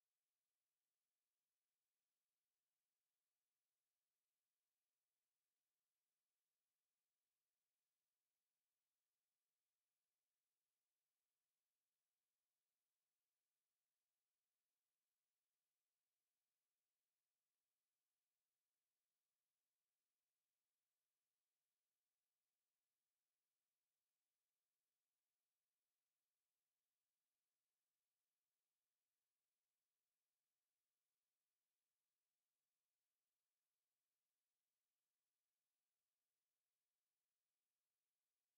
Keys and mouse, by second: 1.2 alt+click, 1.8 click, 4.0 alt+click, 4.4 ctrl+z, 4.6 ctrl+z, 4.8 ctrl+z, 4.9 ctrl+z, 5.4 ctrl+z, 5.7 ctrl+z, 6.0 ctrl+z, 7.7 alt+click, 8.6 alt+right click, 10.3 alt+right click, 14.8 alt+click, 15.3 alt+middle click, 15.9 alt+click, 16.5 shift+right click, 27.5 alt+middle click, 28.5 alt+click, 30.0 click, 30.7 ctrl+z, 31.0 click, 35.8 ctrl+z, 36.2 click, 36.8 alt+click, 37.6 click, 38.1 alt+click.